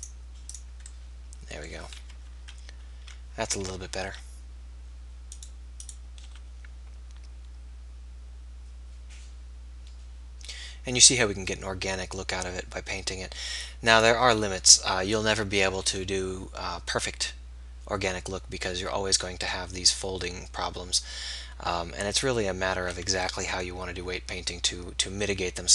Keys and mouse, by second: 2.0 KP_3, 4.2 r, 6.3-9.4 drag, 6.3 r, 14.9 r.